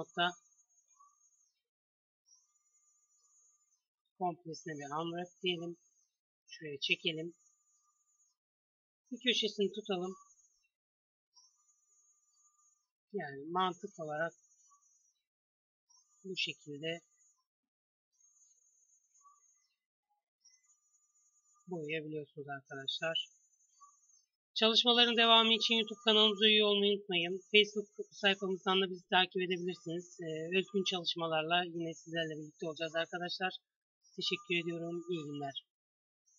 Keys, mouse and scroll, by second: 0.2 click, 2.3 click, 3.1 a, 3.3 a, 4.2 u, 5.0 click, 5.8 g, 7.3-8.4 drag, 8.4 s, 8.9 drag, 9.6 g, 11.2 g, 11.9 s, 12.7 click, 13.1 g, 14.2-16.0 drag, 15.1 g, 16.1 s, 17.1 g, 18.4 s, 19.5 g, 20.5 s, 21.4 g, 23.0-24.1 drag, 27.8 middle click, 28.4 middle click, 29.1 middle click, 30.0-35.4 middle drag.